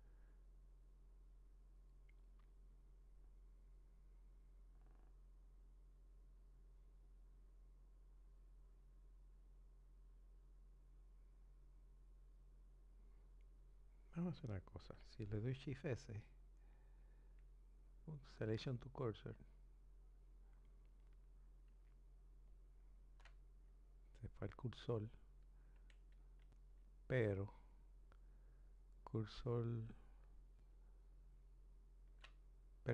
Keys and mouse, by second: 0.8 click, 3.7 click, 8.3 click, 10.7 click, 26.9 shift+s.